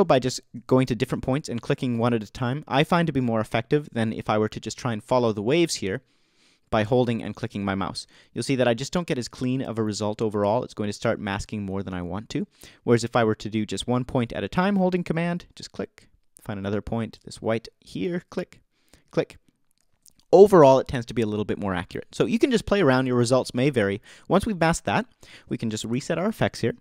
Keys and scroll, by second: 7.9 super+z, 13.0 super+z.